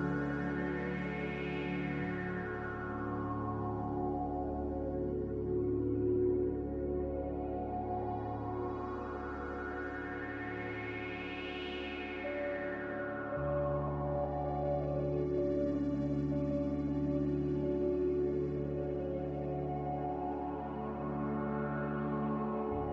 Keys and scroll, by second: 1.1 Return, 5.2 c, 15.1 z, 17.0-17.8 typing, 19.4-20.2 typing.